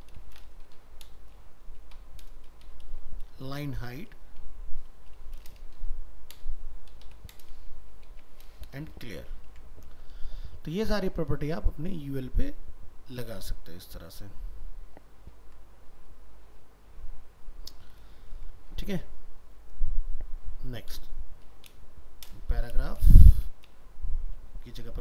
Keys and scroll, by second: 9.5 ctrl+s, 18.4 ctrl+s.